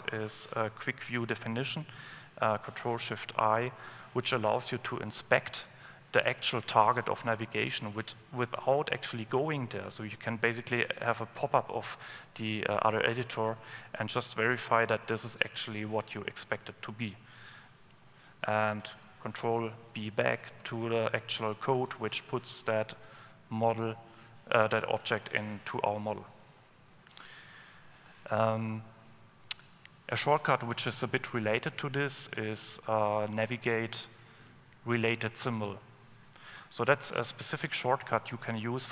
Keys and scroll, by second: 0.8 ctrl+alt+space, 19.2 super+o, 20.7 super+o, 20.8 super+b.